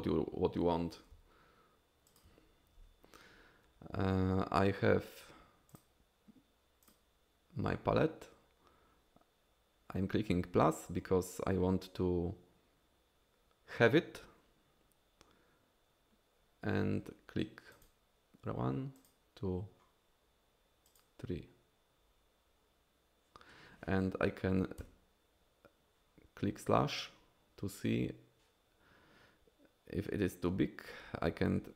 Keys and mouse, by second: 1.2 f, 2.1 f, 2.2 f, 5.7 click, 17.8 click, 19.0 click, 20.9 click.